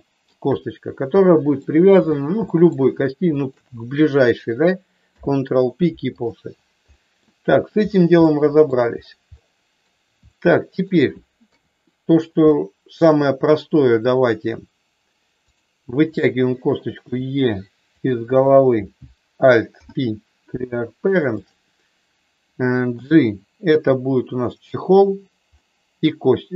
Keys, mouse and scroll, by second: 1.1 middle click, 2.4 middle click, 3.4 shift+click, 5.0 ctrl+p, 6.9 middle click, 8.3 shift+middle click, 9.4 middle click, 10.3 shift+middle click, 11.5 KP_3, 12.5 shift+middle click, 17.0 e, 18.4 click, 19.7 alt+p, 23.0 g, 24.5 click, 25.5-26.5 middle drag.